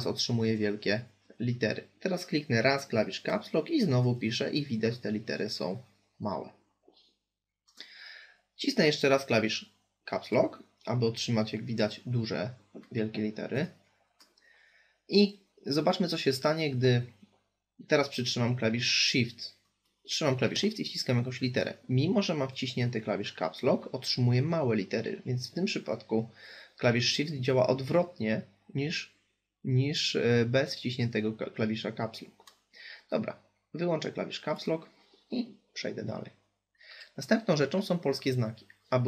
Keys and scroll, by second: 2.0 Caps_Lock.